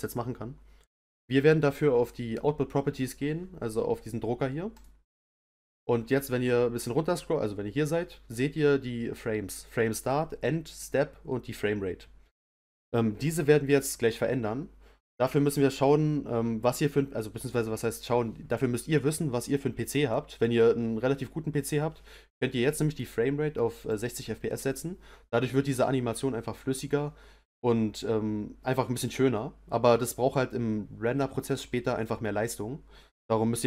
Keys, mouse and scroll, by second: 4.7 click, 6.1-6.4 scroll down 3, 6.4 scroll up 2, 22.9-25.9 drag.